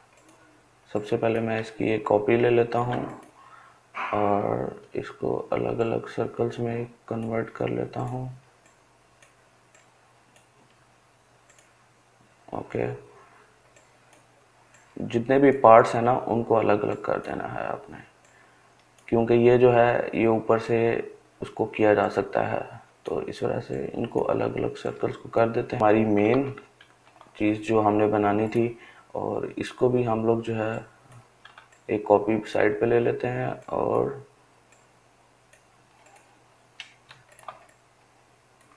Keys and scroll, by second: 25.8 ctrl+z, 35.6-37.4 ctrl+space.